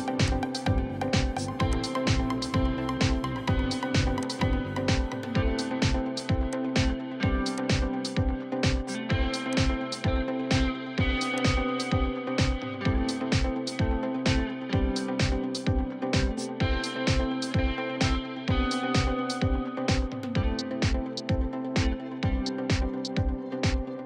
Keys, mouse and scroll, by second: 12.5 middle click, 13.7 scroll down 1, 13.9 middle click, 14.3-14.8 scroll up 1, 14.8 middle click, 15.5-16.1 scroll down 1, 16.1 middle click, 16.8 scroll up 1, 17.1 scroll down 1, 17.4 middle click, 20.4-21.0 scroll down 1, 21.2-21.9 scroll up 1, 21.9 middle click.